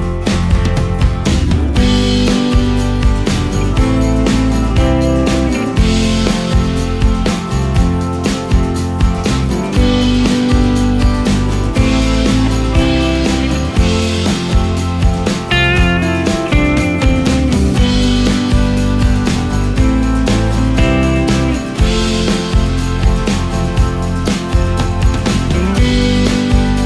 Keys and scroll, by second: 0.6 ctrl+shift+space, 2.3 ctrl+shift+space, 3.1 ctrl+shift+space, 3.7 ctrl+shift+space, 7.5 space, 11.6 ctrl+space, 14.1 ctrl+space.